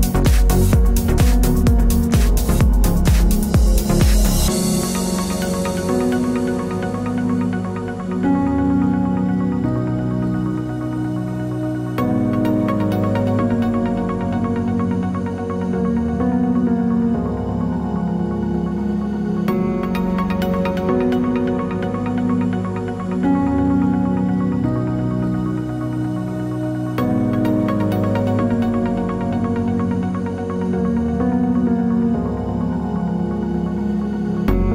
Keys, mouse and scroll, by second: 0.2 t, 0.3 click, 1.3-6.5 typing, 7.5 click, 8.1 KP_1, 8.4 KP_4, 8.5 KP_Enter, 9.7 click, 13.3 ctrl+click, 14.3 click, 14.8 ctrl+d, 17.4-18.8 typing, 19.4 click, 19.9 click, 20.3 g, 21.0 click, 21.4 click, 25.8 click, 26.9 click, 28.3 d, 29.8 click, 30.3 Down, 31.5 right click, 32.4 click, 34.3 click.